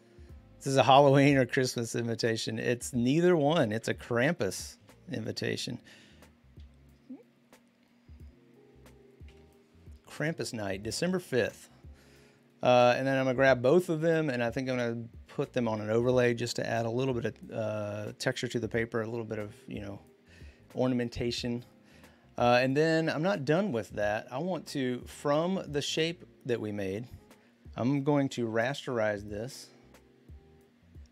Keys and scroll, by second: 4.6 ctrl+t, 9.1 Return.